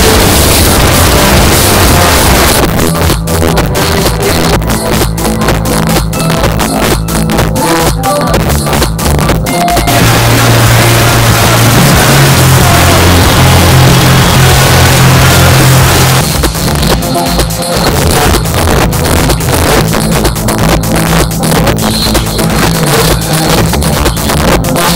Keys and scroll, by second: 2.5 Page_Down, 16.0 Page_Down.